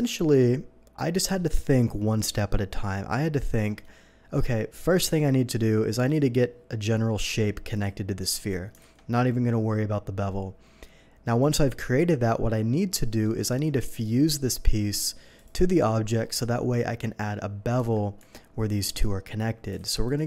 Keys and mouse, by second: 8.8 alt+a, 11.4-19.7 drag, 17.8 Tab, 18.3 Tab, 19.8 alt+a.